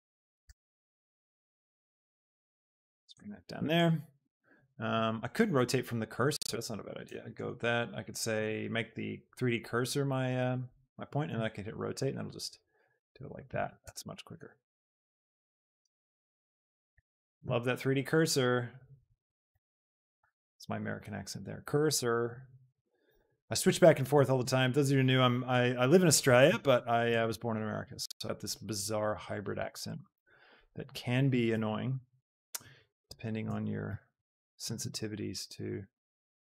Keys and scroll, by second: 0.3 Escape, 1.8 y, 6.9 shift+d, 11.3 r, 13.5 d, 13.9 Escape, 16.8 shift+d, 17.6 r, 19.4 shift+F1, 20.1 r, 29.7 Tab, 31.9 ctrl+KP_Add, 34.8 z.